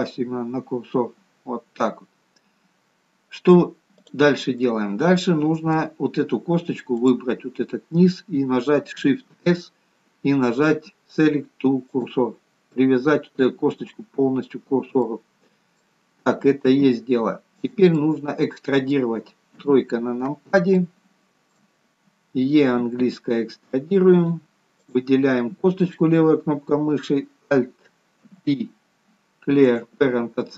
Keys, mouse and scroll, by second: 0.1-1.2 scroll up 1, 1.2-1.7 scroll up 3, 1.7 scroll down 2, 4.2 click, 4.6 middle click, 6.0-6.9 scroll up 1, 6.9 click, 6.9 scroll up 2, 9.4 shift+s, 12.6-13.6 scroll down 4, 13.6-14.3 scroll up 2, 14.3-14.7 scroll down 1, 14.9-15.8 scroll up 1, 15.8 middle click, 16.6 KP_3, 17.9-19.5 scroll up 1, 19.5 middle click, 19.5 KP_3, 20.6 shift+middle click, 22.8 e, 24.8 click.